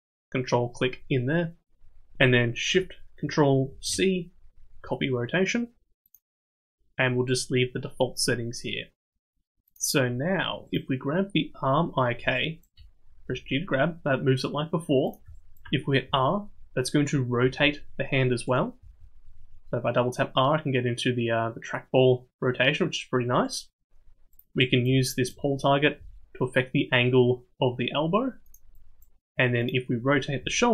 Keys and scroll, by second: 3.6 ctrl+shift+c, 13.2 g, 16.0 r, 18.8 r, 25.9 g, 30.3 r.